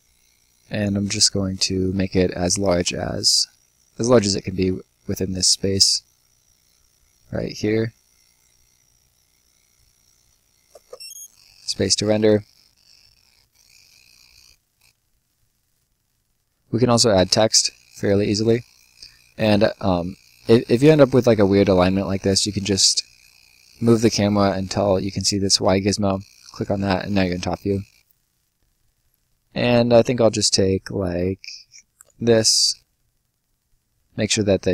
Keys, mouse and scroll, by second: 2.4 shift+click, 5.6 shift+click, 9.9 click, 10.6 space, 12.1 right click, 14.3 Escape, 15.2-16.7 scroll down 1, 16.7 click, 17.4 middle click, 17.9 right click, 20.4 middle click, 20.7 right click, 21.6 middle click, 22.1 right click, 26.0 click, 26.7-27.5 scroll up 2, 26.7 middle click, 27.5 middle click, 31.9 click.